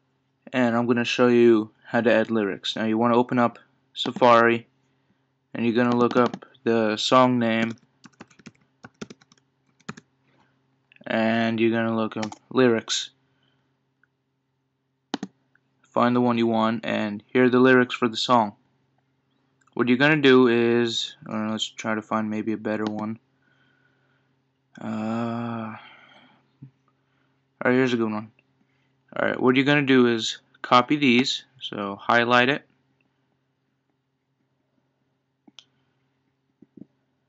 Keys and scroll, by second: 10.7 Down, 12.2 Return, 21.5 super+Left.